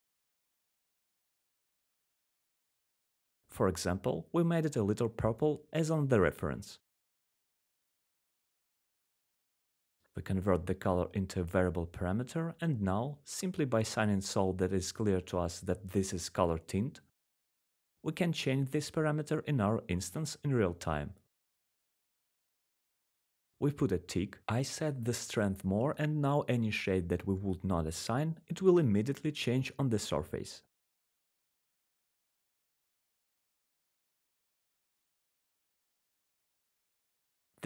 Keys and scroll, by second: 9.0 c, 12.9-15.7 typing, 15.9 Return.